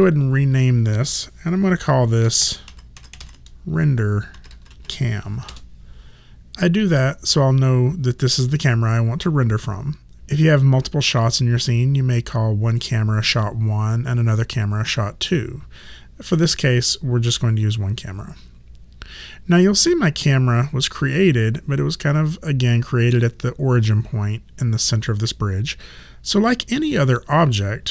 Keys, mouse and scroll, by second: 0.0 click, 2.0-4.7 typing, 5.5 KP_Enter.